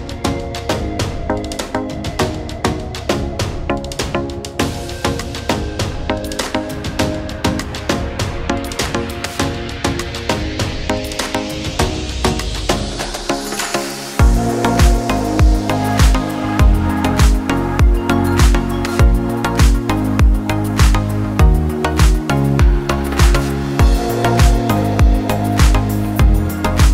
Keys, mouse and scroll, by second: 1.5-1.9 scroll up 1, 2.9 click, 8.6 right click, 9.5 click, 17.3 click, 18.9 click, 19.2 scroll down 1, 20.5 click, 23.4-23.9 scroll up 1, 25.7 click.